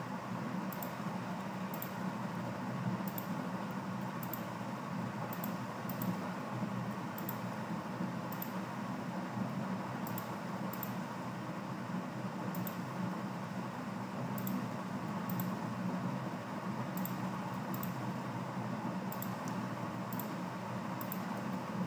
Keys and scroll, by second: 1.4 v, 2.4 i, 3.9-5.4 typing, 6.8 v, 9.4 v, 11.2 i, 14.9-16.2 typing, 17.3 v, 19.8 v, 21.4 typing.